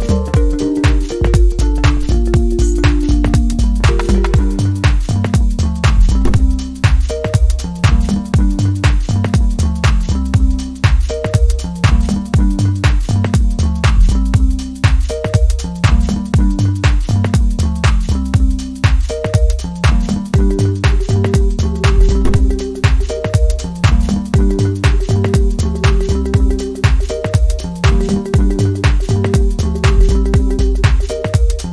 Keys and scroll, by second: 2.8-3.2 scroll down 1, 3.4-3.8 scroll down 1, 3.9 scroll up 1, 4.6-4.9 scroll up 1, 7.4 scroll down 1, 8.0-8.3 scroll up 1, 8.3 scroll down 1, 8.4 scroll up 1, 9.1-9.5 scroll up 1, 11.1 scroll down 1, 11.7-12.1 scroll down 1, 12.5-13.0 scroll up 2, 13.4 scroll down 1, 14.2 scroll down 1, 14.6 scroll up 1, 15.0 scroll down 1, 15.2 scroll up 1, 16.7 scroll down 1, 17.8-18.2 scroll down 1, 18.2-18.5 scroll up 1, 19.8-20.2 scroll down 1, 20.5-20.9 scroll down 1, 20.9-21.3 scroll up 1, 21.8-22.2 scroll down 1, 22.4 scroll down 1, 22.5-22.9 scroll up 1, 23.0-23.6 scroll down 2, 23.6 scroll up 1, 24.2-24.6 scroll up 1.